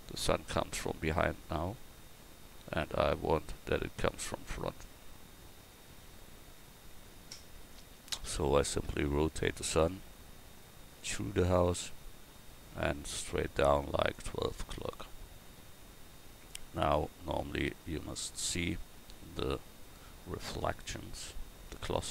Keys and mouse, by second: 10.0 r, 12.8-14.1 drag, 12.8 r, 16.2-18.1 drag, 18.1-22.1 right drag.